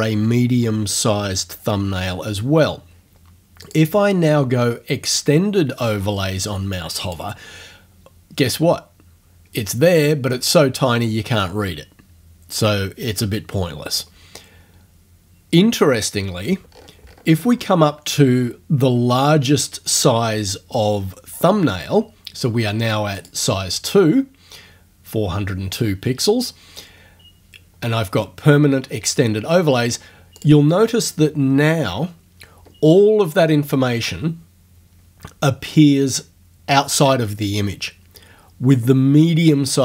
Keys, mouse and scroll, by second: 3.6 click, 7.0 click, 16.7-17.8 ctrl+scroll up 2, 18.4 ctrl+scroll down 2, 18.8-20.0 ctrl+scroll up 2, 23.2 click, 30.4 click.